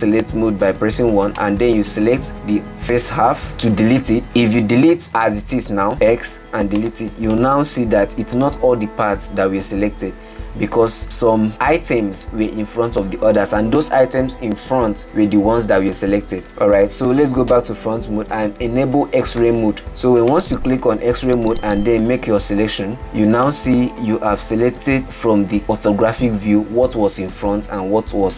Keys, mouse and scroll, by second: 1.8 click, 6.0 x, 7.8-10.8 middle drag, 16.9 ctrl+z, 17.9 KP_1, 19.8 alt+z, 20.8 Left, 22.1 click, 23.5-23.9 scroll down 3, 23.9-26.8 middle drag.